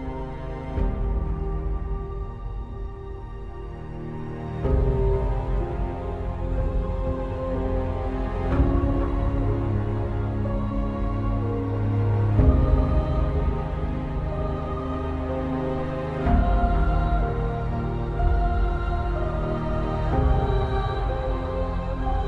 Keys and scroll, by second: 15.2 alt+space, 21.2 alt+Return.